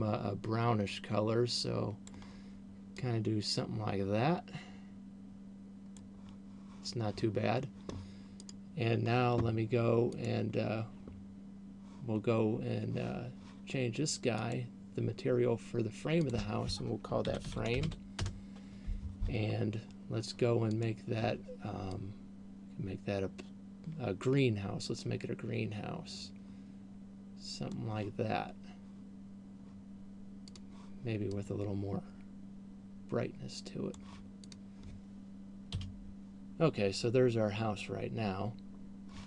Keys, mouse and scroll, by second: 8.8 right click, 10.3 click, 14.8 click, 16.3 click, 19.8-20.3 scroll down 4, 21.1 click, 30.6 click.